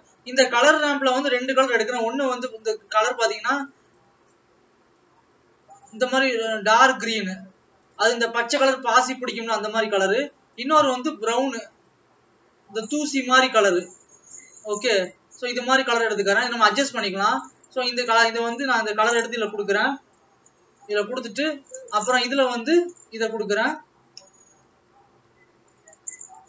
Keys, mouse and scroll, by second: 8.0 click, 9.4 click, 14.2 click, 16.1 click.